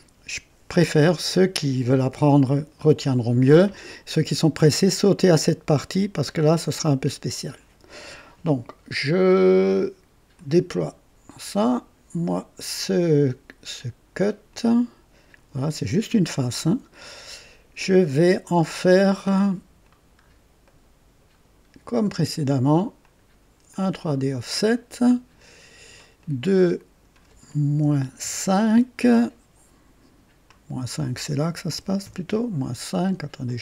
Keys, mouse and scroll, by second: 10.3 click, 12.7 click, 14.4 click, 15.3 click, 20.1-20.4 scroll up 1, 20.6-21.4 right drag, 23.0 click, 23.7 click, 25.0 click, 26.2 click, 27.8 -, 28.2 KP_5, 30.4 click, 31.6 -, 32.0 KP_5, 32.2 KP_5, 33.4-33.6 drag.